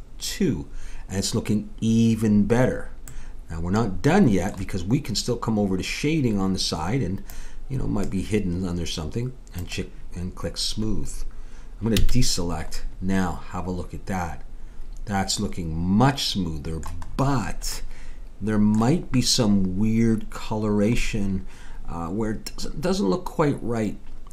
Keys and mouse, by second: 3.1 middle click, 7.3-9.2 drag, 9.6-11.5 drag, 12.0 a, 17.1-20.7 middle drag, 21.0 middle click.